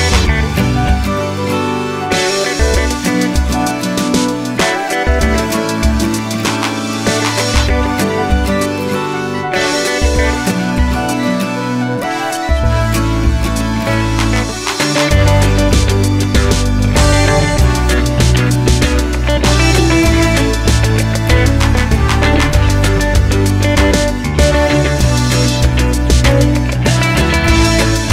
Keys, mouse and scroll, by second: 0.4 click, 1.2 Tab, 2.4-6.0 middle drag, 3.0 Tab, 4.7 g, 6.0 click, 6.1 g, 7.3-9.2 middle drag, 9.2 click, 10.6 g, 15.2 click, 16.5 g, 18.3 click, 19.5-21.7 middle drag, 20.9 g, 21.7 click, 21.8-26.2 middle drag, 23.7 alt+h, 26.2 click.